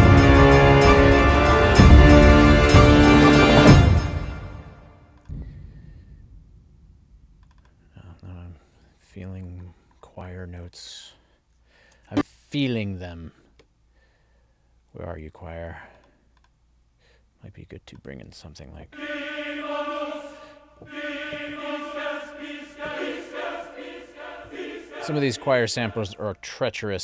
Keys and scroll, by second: 3.6 space, 11.8 ctrl+alt+l.